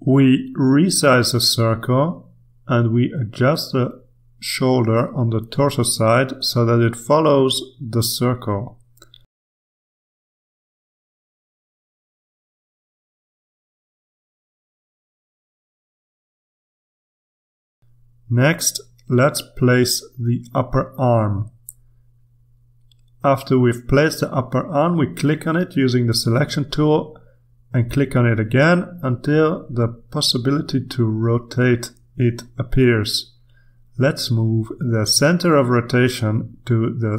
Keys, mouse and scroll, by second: 4.4 click, 5.8 click, 7.2-8.3 ctrl+scroll up 3, 9.3-11.1 drag, 11.2 click, 12.1 click, 13.0 click, 13.5 click, 14.1 click, 14.7 click, 15.1 click, 16.3 click, 17.3 click, 18.1 click, 19.2-20.1 scroll down 1, 20.1-23.0 drag, 23.5 click, 28.2 click, 31.8-37.1 drag.